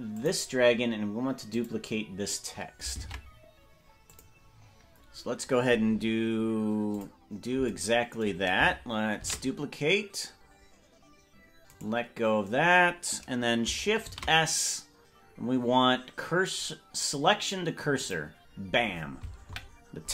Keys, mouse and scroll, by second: 0.1 click, 0.6-1.0 scroll down 2, 1.5 click, 3.2 ctrl+Tab, 4.0 click, 4.8-5.2 scroll down 3, 6.9 click, 9.6 shift+d, 14.0 shift+s, 19.4 KP_Decimal.